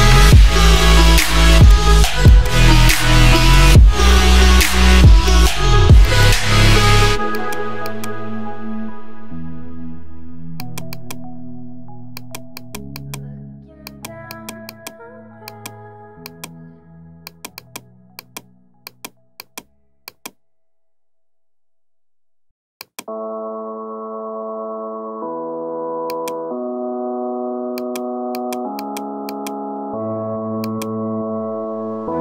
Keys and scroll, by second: 7.6 space, 8.8 [, 13.3 ], 23.2 ], 30.1 ].